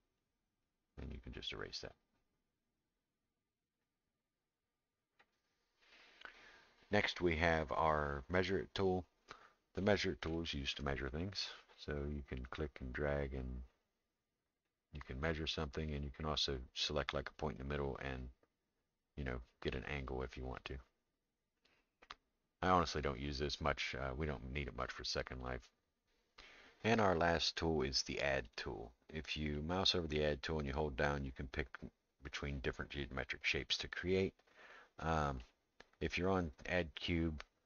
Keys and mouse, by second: 0.2-5.2 drag, 8.4 click, 10.3 shift+middle click, 12.5-14.7 drag, 16.9-19.7 drag, 28.4 click, 29.5-35.4 drag, 37.4 middle click.